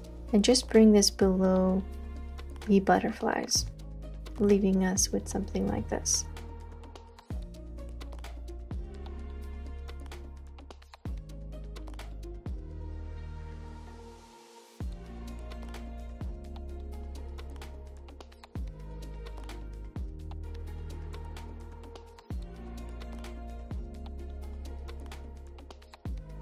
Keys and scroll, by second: 4.0 space, 4.2 space, 4.3-26.4 space.